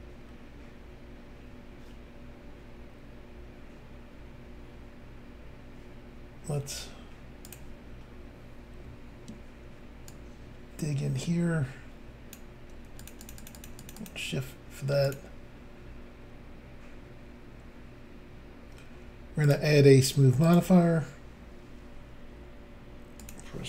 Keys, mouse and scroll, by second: 7.5 click, 7.5 click, 10.1 click, 13.0 shift+click, 13.1 shift+click, 13.3 click, 13.3 shift+double click, 13.4 click, 13.5 shift+click, 13.6 shift+click, 13.7 shift+double click, 13.8 shift+click, 13.9 shift+click, 14.0 shift+click, 14.1 shift+double click, 15.1 click, 15.1 click, 19.4 click, 19.5 click, 20.4 click, 20.5 click, 23.2 click.